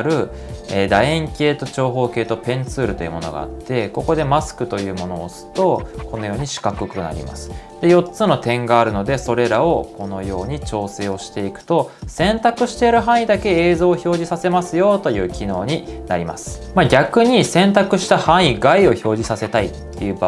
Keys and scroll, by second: 16.6 super+z.